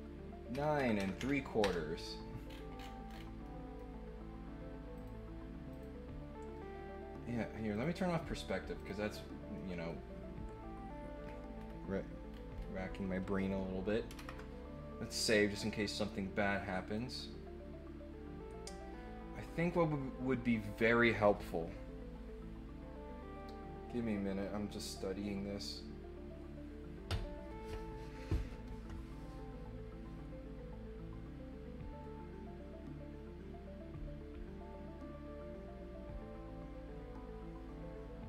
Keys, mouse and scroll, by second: 2.4 scroll up 1, 2.7-3.2 scroll down 2, 3.4 middle click, 4.9 click, 5.7 click, 7.7 click, 8.7 click, 9.5 middle click, 11.2-11.6 scroll up 2, 12.3 scroll down 2, 12.5 scroll up 2, 15.9-16.9 middle drag.